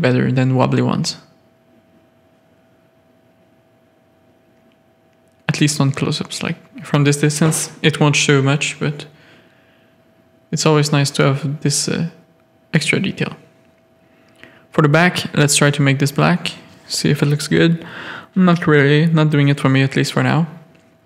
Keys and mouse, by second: 0.2 middle click, 0.9 z, 3.0-6.3 middle drag, 6.9-11.3 middle drag, 11.8-12.5 middle drag, 13.3 click, 13.7 middle drag, 15.1-15.7 drag, 16.1-17.6 drag, 18.5 ctrl+z, 18.8 ctrl+z, 19.3 alt+a, 19.7 middle drag, 20.3 middle click, 20.5 middle click.